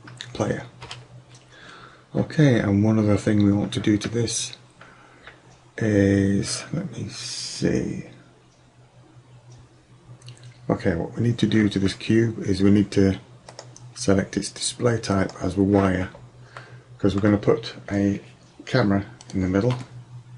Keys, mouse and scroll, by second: 13.5 click, 16.7 middle click, 16.9 middle click.